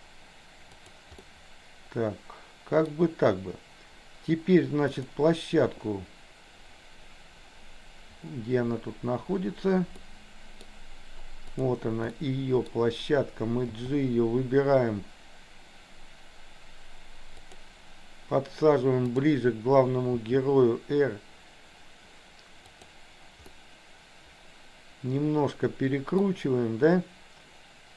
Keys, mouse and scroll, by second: 1.3-2.9 middle drag, 5.0 click, 10.0 middle click, 11.5 click, 12.1 middle click, 13.8 g, 19.0 click, 20.1 r, 23.5-26.3 middle drag.